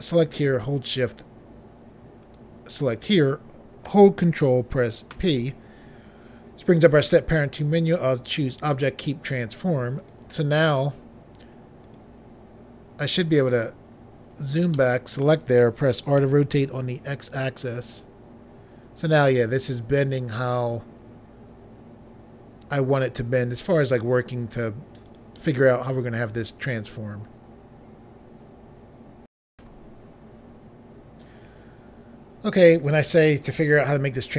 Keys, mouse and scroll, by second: 2.4 shift+click, 5.3 ctrl+p, 8.7 click, 10.1 click, 12.0 click, 13.8 scroll down 1, 14.5 scroll down 1, 14.9 middle click, 16.1 typing, 25.2 right click, 29.5 Pause.